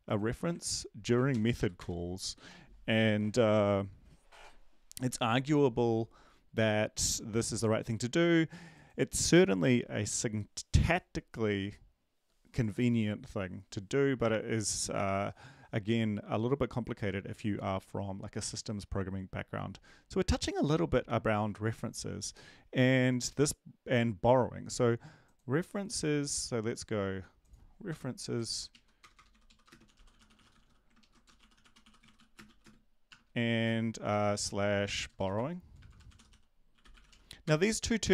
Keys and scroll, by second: 1.3 ctrl+l, 1.6 Up, 1.8 Return, 27.9 Return, 28.4 ctrl+z, 28.7 Right, 29.0 Return, 29.0-32.9 typing, 34.9-38.1 typing.